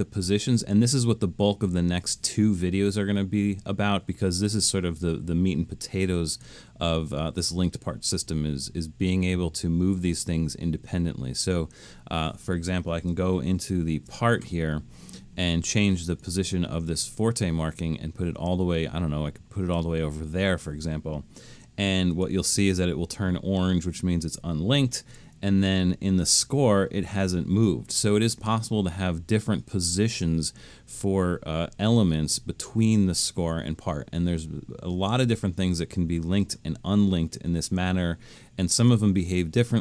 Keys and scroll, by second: 13.6 alt+super+., 25.0 alt+super+,.